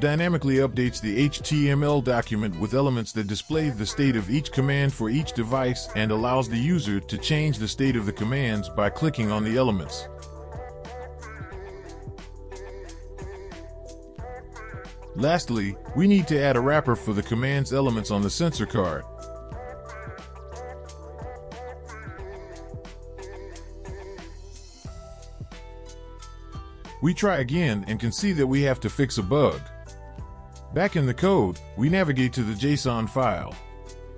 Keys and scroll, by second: 5.9 typing, 6.8 ctrl+shift+s, 12.7 typing, 15.7 typing, 20.6 typing, 21.7 Return, 22.4 BackSpace, 22.8 ctrl+v, 25.9 BackSpace.